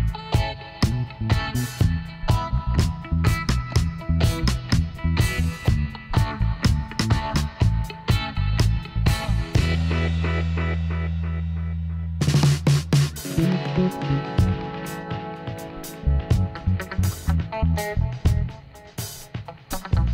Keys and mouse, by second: 3.0 KP_7, 9.1 Tab, 9.4 middle click, 12.4-16.7 middle drag, 16.7 click, 17.5-18.7 middle drag.